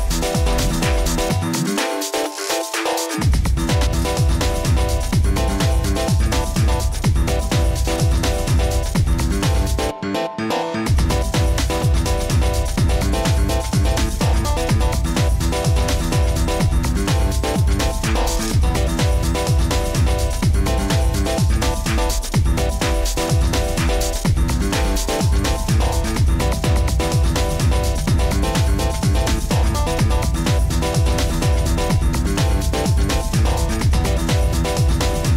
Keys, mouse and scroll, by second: 1.9-3.0 scroll, 6.6 click, 8.6 click, 12.0-12.9 middle click, 12.2 middle click, 13.8 click, 16.0 click, 16.2-18.2 click, 16.3 click, 18.6 click, 19.2-19.9 scroll, 21.4 scroll, 21.4 middle click, 21.7 middle click, 21.8 middle click, 24.2 click, 24.9 click, 24.9-26.0 scroll, 26.0 click, 28.6 click, 29.2-30.5 scroll, 34.3-34.6 scroll.